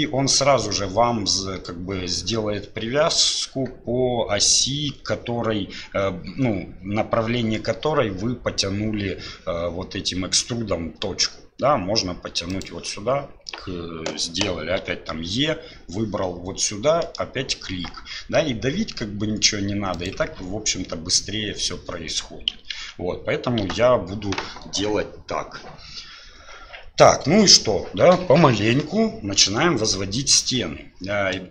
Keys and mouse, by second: 22.8 ctrl+z.